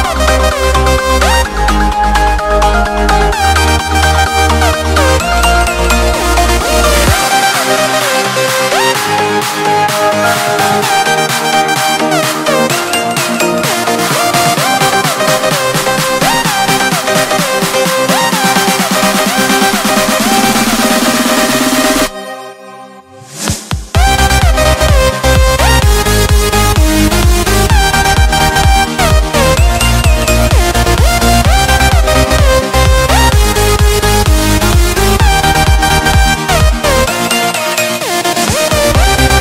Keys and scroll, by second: 2.5 Escape, 20.5 alt+7, 24.7 Escape, 35.3 Return, 37.5 typing.